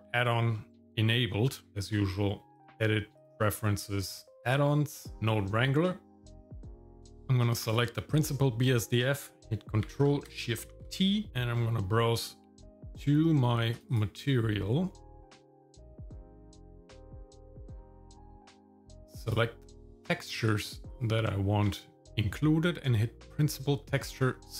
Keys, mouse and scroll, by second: 0.5 middle click, 1.7 click, 2.5 click, 7.6 click, 10.7 ctrl+shift+t.